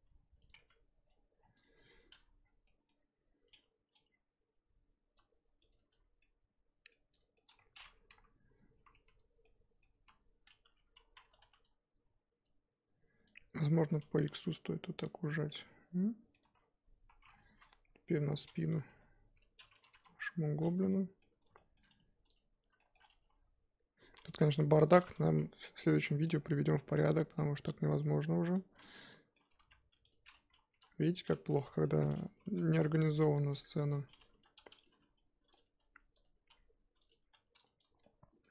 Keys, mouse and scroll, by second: 0.0 g, 0.5 Tab, 1.3 scroll down 1, 1.5 click, 1.9 Tab, 2.1 a, 3.9 click, 4.6 g, 5.8 Tab, 6.2-7.1 middle drag, 7.1 click, 7.3 middle drag, 7.5-8.1 scroll up 1, 8.1 KP_1, 8.6 scroll up 2, 8.7 KP_1, 9.4-9.9 middle drag, 9.9 KP_1, 10.6 Tab, 10.8 scroll up 1, 11.0 z, 12.4 click, 13.7 shift+click, 14.2 s, 15.2 z, 15.4 scroll down 2, 15.4-16.4 middle drag, 16.4 Tab, 16.5-17.3 scroll down 1, 17.3-17.7 scroll down 3, 17.7 KP_7, 18.3-18.8 scroll down 1, 18.8 g, 19.9 KP_3, 20.2-20.9 scroll up 5, 20.9-21.8 middle drag, 21.8-22.3 scroll up 1, 22.3 click, 22.8-23.2 shift+middle drag, 23.2 g, 24.7 click, 25.0 scroll up 1, 25.2 KP_3, 25.8 scroll down 3, 26.0 middle drag, 26.2 scroll up 1, 26.4-27.0 scroll down 8, 27.0-28.7 middle drag, 28.7 click, 28.9-29.5 middle drag, 29.5 g, 30.2 click, 30.5 scroll up 1, 30.7 KP_3, 31.6 click, 31.8-32.4 shift+middle drag, 32.4 g, 32.9 scroll up 1, 33.5 click, 33.7-34.3 shift+scroll up 2, 33.7 shift+middle click, 34.3 g, 37.8 click, 38.0-38.5 middle drag.